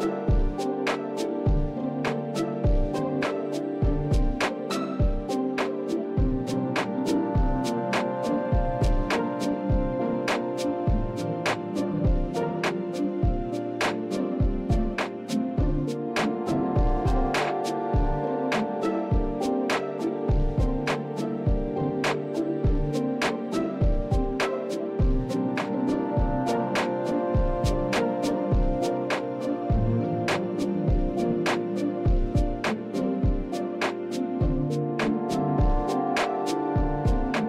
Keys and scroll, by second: 2.3 shift+z, 3.0 Tab, 5.2 ctrl+KP_3, 6.6 Delete, 7.8 ctrl+KP_3, 8.4 shift+a, 15.8 Tab, 17.6 s, 26.7 Delete, 28.6 Delete, 31.4 e, 34.9 e.